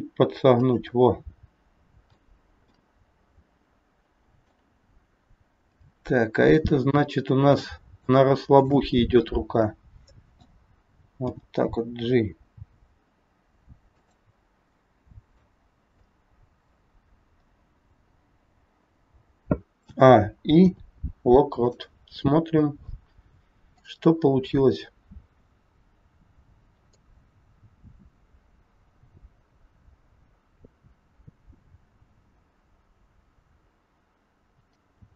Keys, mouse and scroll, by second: 0.9 middle click, 2.7 middle click, 5.6 click, 6.3 scroll up 2, 7.7 middle click, 8.6 shift+click, 9.0 middle click, 11.2 g, 14.7 middle click, 15.7-16.1 scroll down 2, 16.1 middle click, 17.4 scroll down 1, 19.8 a, 20.5 i, 23.8 click, 24.5 scroll up 2, 26.9 click.